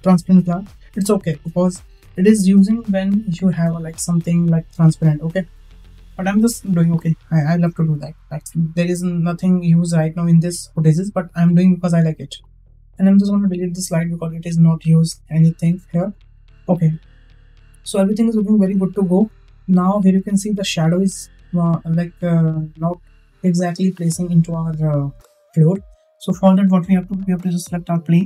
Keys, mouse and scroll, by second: 0.6 click, 6.8 click, 13.2 click, 14.8 Delete, 27.5 click.